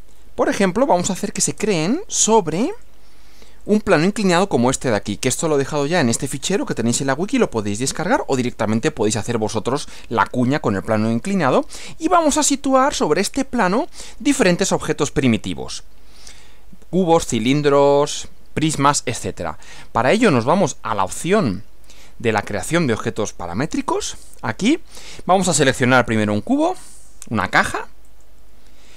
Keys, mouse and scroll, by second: 0.1 click, 0.3 Delete, 0.8 click, 1.5 space, 2.7 click, 3.7 click, 4.5-5.3 middle drag, 5.5-6.1 middle drag, 9.4 middle click, 10.2-11.7 middle drag, 23.7 click, 25.5 click, 28.1 click.